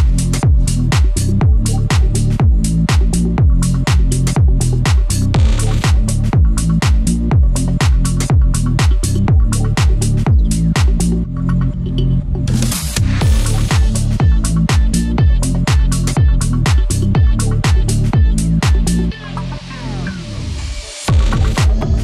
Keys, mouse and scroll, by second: 2.4 click, 3.7 scroll down 1, 6.0 scroll up 1, 6.8 scroll down 1, 8.3 scroll down 1, 8.8 click, 11.5 ctrl+z, 14.4 click, 17.5 ctrl+z, 18.6 click, 19.2 scroll down 1, 19.7 scroll up 1, 19.9 click, 20.2 scroll up 1, 20.6 shift+click, 21.8 ctrl+z.